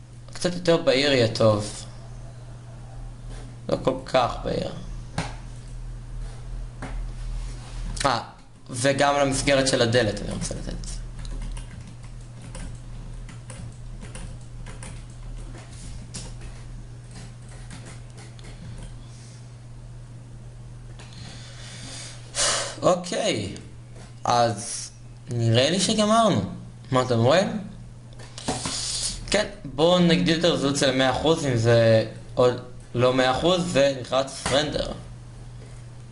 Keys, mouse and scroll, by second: 2.9 shift+z, 9.5 shift+z, 10.0 Tab, 11.1 Tab, 13.0 Tab, 14.0 a, 14.8 a, 15.5 a, 16.3 a, 17.5 ctrl+KP_Add, 19.3 Tab, 20.2 shift+z, 30.8 shift+z, 33.9-36.1 drag.